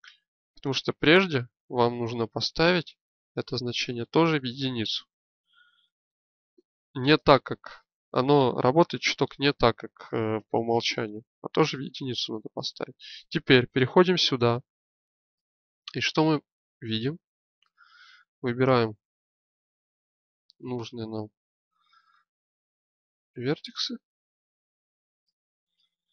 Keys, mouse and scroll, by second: 7.7-13.5 middle drag, 12.6 Tab, 17.7 middle click, 18.2-21.5 drag, 25.1-26.1 drag.